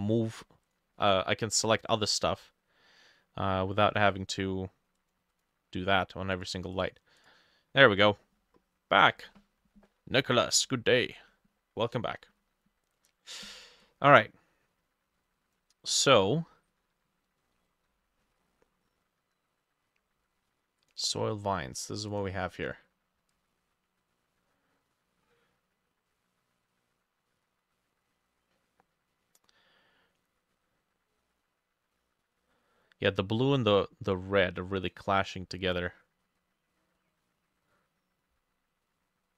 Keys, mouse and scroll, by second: 1.0 middle click, 1.4-2.6 scroll down 1, 5.4 double click, 6.8 double click, 7.2 double click, 17.4 middle click, 18.4 middle click.